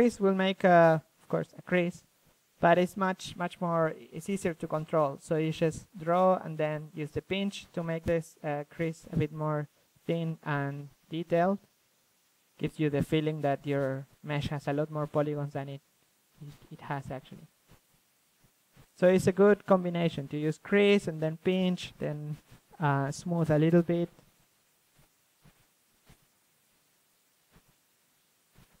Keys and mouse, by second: 1.6-2.3 drag, 2.3 f, 2.6-3.8 drag, 4.1-6.7 drag, 6.0 shift+c, 6.7 f, 7.1-8.5 drag, 8.5 ctrl+z, 9.0-12.0 drag, 12.0 f, 12.2-13.6 drag, 13.6 ctrl+z, 13.7 click, 14.6-16.9 drag, 17.0-18.7 middle drag, 20.0-21.9 drag, 23.2-28.8 drag.